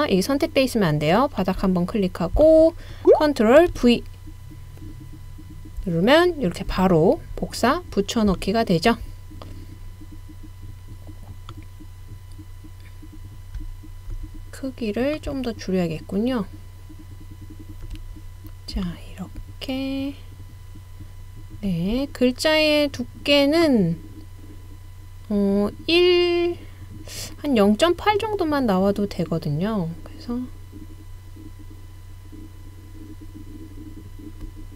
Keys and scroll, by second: 3.7 super+v.